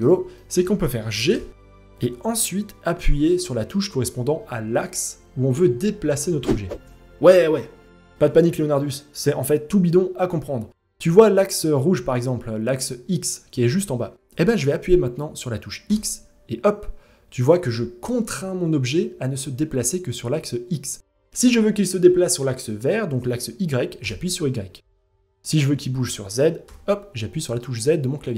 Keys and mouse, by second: 0.9 g.